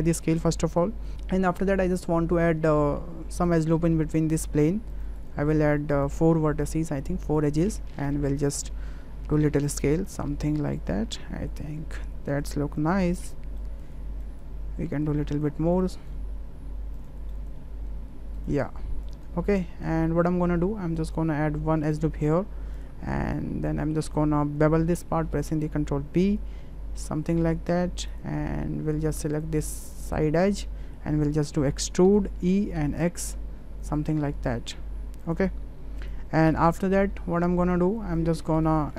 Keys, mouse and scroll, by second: 1.0 Tab, 1.1 ctrl+z, 3.4 click, 4.9 click, 5.1 click, 5.9 click, 7.2 click, 8.1-8.6 drag, 9.2 s, 11.2 click, 11.9 s, 12.8 click, 13.6 click, 14.3 click, 14.8 s, 15.8 click, 16.5 s, 17.3 click, 19.1 click, 19.5 shift+click, 20.9 click, 21.9 click, 22.7 click, 23.1 ctrl+click, 23.3-24.0 ctrl+scroll up 1, 24.9 ctrl+b, 29.3 click, 30.6-30.9 shift+middle drag, 32.1 e, 36.0 click, 36.5 Tab, 37.4-37.7 middle drag, 38.4 middle click.